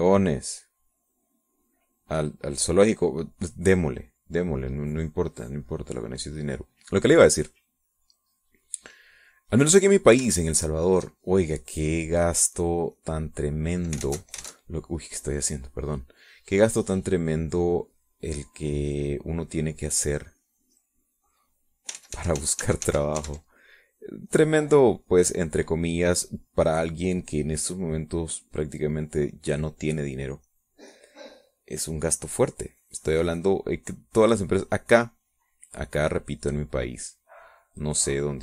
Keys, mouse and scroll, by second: 6.2 middle click, 8.3-10.6 drag, 11.8 ctrl+click, 12.8-14.8 drag, 15.0 alt+Tab, 15.7-19.6 alt+middle drag, 20.8-22.8 drag, 22.9 ctrl+z, 24.8-34.7 drag, 34.7 click, 35.5-38.4 drag.